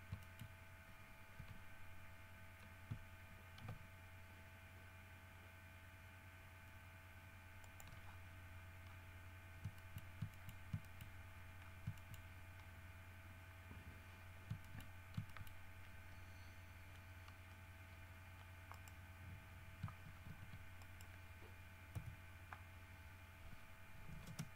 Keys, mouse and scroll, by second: 0.4 shift+middle click, 1.5 r, 7.8 shift+middle click, 8.7-9.6 scroll down 3, 9.9 shift+middle click, 10.5 shift+middle click, 11.0 shift+middle click, 11.5-12.0 shift+scroll down 4, 12.1 shift+middle click, 12.4-13.0 shift+scroll up 4, 13.4-13.7 scroll down 1, 14.5 scroll down 1, 14.8 shift+middle click, 15.1 shift+scroll up 1, 15.4 shift+middle click, 18.9 right click, 20.4 shift+d, 21.0 shift+right click, 22.1 KP_1, 24.4 space.